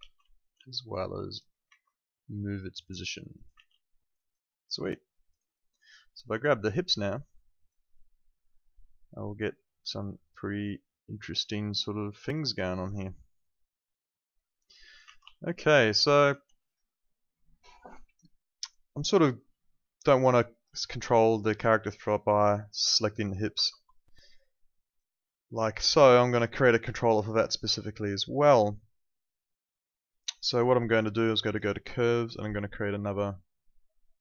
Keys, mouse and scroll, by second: 0.3 alt+click, 0.5 w, 1.0 click, 1.7 ctrl+z, 2.1 click, 3.5 ctrl+z, 3.8 alt+middle click, 4.1 alt+right click, 4.5 alt+middle click, 4.9 alt+click, 5.3 alt+right click, 5.7 alt+click, 6.0 alt+middle click, 6.2 alt+right click, 7.5 click, 15.4 alt+click, 15.7 alt+right click, 16.0 alt+middle click, 16.2 alt+right click, 20.0 alt+click, 21.1 alt+middle click, 21.4 alt+right click, 21.8 alt+middle click, 22.7 click, 23.6 z, 23.9 alt+click, 30.3 click.